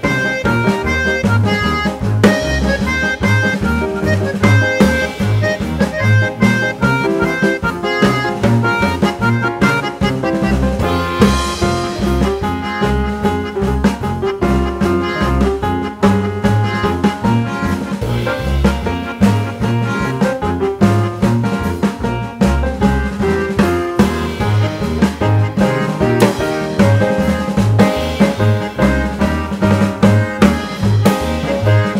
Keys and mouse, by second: 1.3-3.2 drag, 4.3-6.1 drag, 7.9 click, 9.0-10.9 drag, 12.0-13.8 drag, 15.4-17.1 drag, 17.8 click, 19.4 g, 21.9-23.7 drag, 24.5-26.6 drag, 28.1-28.6 drag, 30.0 click.